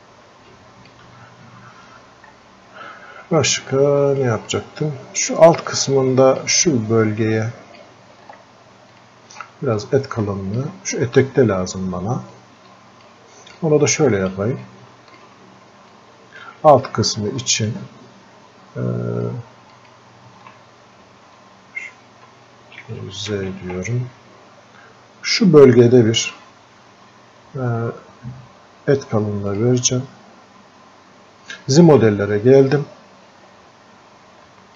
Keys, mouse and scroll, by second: 1.9 scroll up 1, 2.6-3.2 scroll down 1, 3.8 alt+click, 4.5 click, 5.7-7.4 drag, 7.4-10.3 drag, 10.3-12.4 alt+drag, 12.4 click, 13.6 click, 14.7 click, 15.9-17.7 alt+drag, 17.7-21.3 ctrl+shift+drag, 22.8 ctrl+z, 29.5 click, 33.0 scroll up 1, 33.4-33.7 scroll down 1.